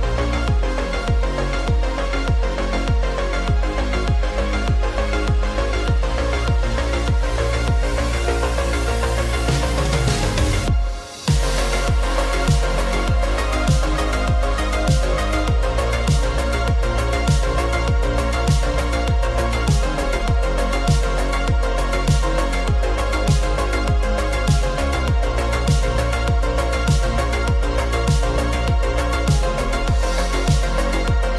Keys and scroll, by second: 2.3 super+0, 4.4 super+0, 6.3 super+-, 6.5 super+-, 17.1 z, 18.1 v.